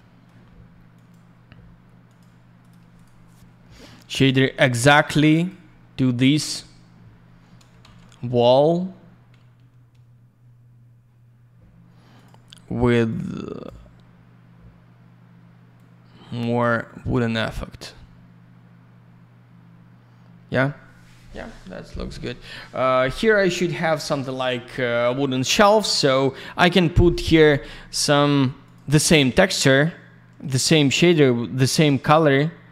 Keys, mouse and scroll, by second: 0.9 click, 1.1 click, 2.0 click, 2.2 click, 2.6 click, 2.9 click, 3.0 double click, 3.6 middle click, 3.7 middle click, 4.8 click, 5.3 click, 5.4 click, 6.2 click, 6.3 click, 7.8 alt+shift+й, 12.1 click, 12.2 click, 13.1 click, 15.7 click, 17.4 click, 23.1-24.4 scroll up 1, 27.5 click, 28.6 click, 30.3 alt+middle click, 30.4 alt+я, 30.6 click, 31.8 alt+й, 32.3 alt+middle click.